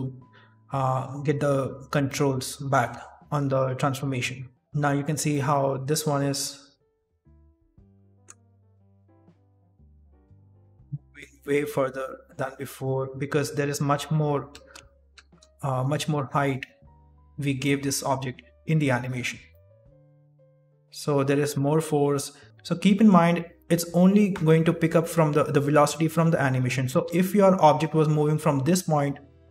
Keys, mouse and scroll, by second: 2.0 shift+middle click, 2.5 middle click, 3.1 shift+middle click, 4.5 click, 4.5 scroll down 3, 4.5 shift+space, 4.8 shift+middle click, 5.2 middle click, 5.7 right click, 6.0 s, 7.0-7.8 scroll down 4, 7.3 middle click, 8.0 shift+middle click, 8.5 s, 9.2 middle click, 9.5-9.9 scroll up 2, 10.0 shift+middle click, 12.6 middle click, 14.5 shift+space, 15.2 shift+space, 16.0 right click, 19.4 middle click, 22.9 middle click, 22.9-23.2 scroll up 1, 22.9 d, 27.1-29.5 typing, 28.3 click.